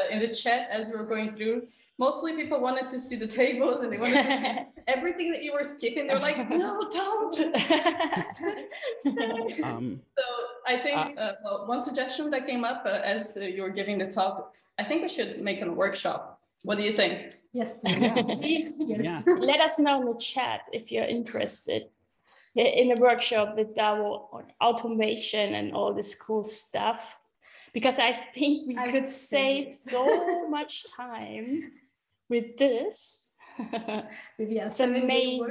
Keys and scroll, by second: 8.4 Escape, 10.3 super+..